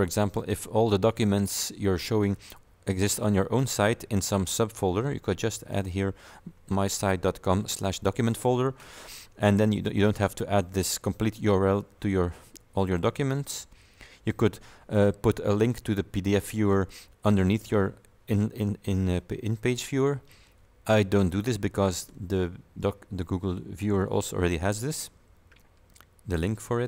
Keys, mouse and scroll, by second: 5.8 click.